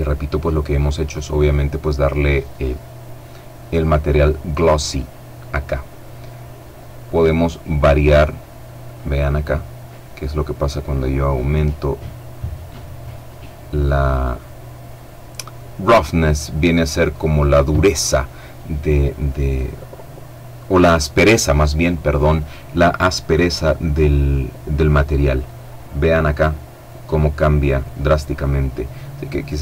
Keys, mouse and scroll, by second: 0.5 right click, 6.6-12.0 drag, 28.7 click.